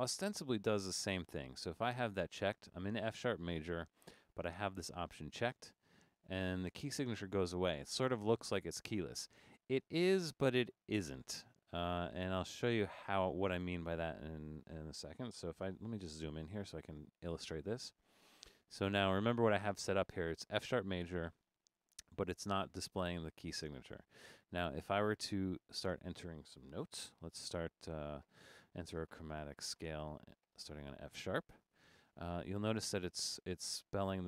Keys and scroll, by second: 15.6 super+=.